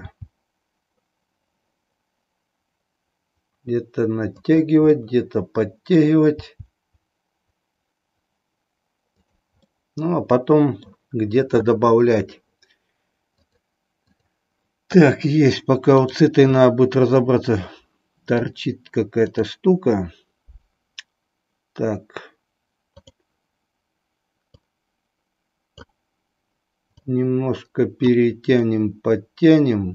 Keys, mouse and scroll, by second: 0.1 g, 5.0-6.2 middle drag, 6.5 g, 9.8-11.0 middle drag, 13.4 click, 16.0 click, 16.8-18.5 middle drag, 19.3 click, 22.9 click, 24.5-25.8 drag, 26.9-28.2 drag, 28.7-29.9 middle drag.